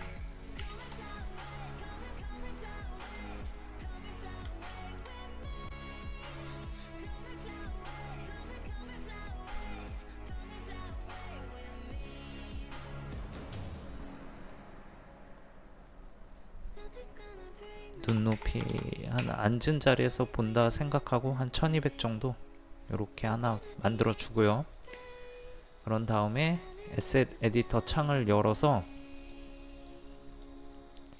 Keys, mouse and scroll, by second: 0.0 KP_3, 2.1 click, 3.9 middle click, 7.1 click, 9.8 click, 18.2 KP_1, 18.4 KP_2, 18.6 KP_0, 27.5-31.1 drag.